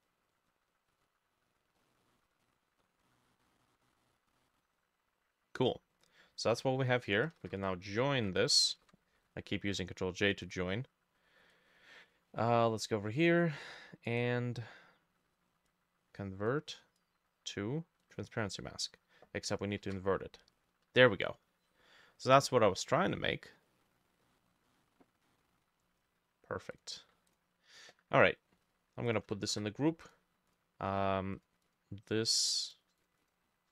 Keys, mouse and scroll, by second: 1.8 middle click, 2.5 scroll up 1, 2.8 scroll down 1, 3.1 middle click, 8.2 ctrl+z, 8.9 ctrl+e, 10.5 double click, 14.1 right click, 19.9 ctrl+i, 22.0-22.4 scroll up 1, 22.4 middle click, 22.9-23.7 scroll up 2, 23.7 middle click, 23.9-24.7 scroll down 2, 24.3 middle click, 24.7 middle click, 25.0 scroll up 1, 25.3 middle click, 29.1 shift+click, 29.5 ctrl+g, 31.7 double click, 32.7 double click, 33.0 double click, 33.2 double click.